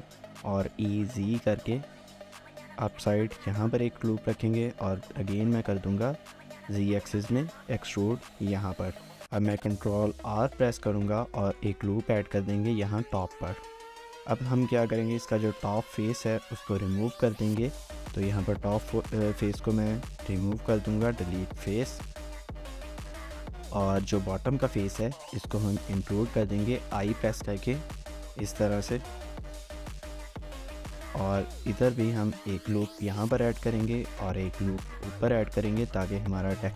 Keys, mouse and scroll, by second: 0.4-0.7 typing, 4.1-5.8 typing, 10.9 ctrl+r, 13.5 scroll down 1, 14.2 middle click, 15.0 Tab, 15.5 shift+middle click, 15.8 Tab, 16.2 z, 21.7 shift+middle click, 22.0 scroll down 1, 22.2 shift+middle click, 23.7 middle click, 23.9 shift+middle click, 26.5-29.3 scroll, 29.3 scroll down 2, 29.5 shift+middle click, 30.2 Tab, 30.4 scroll down 1, 30.6 shift+middle click, 31.4 Tab, 31.7 ctrl+r, 33.4 ctrl+r, 33.6 shift+middle click, 34.3 ctrl+r, 36.5 ctrl+r, 36.6 shift+middle click.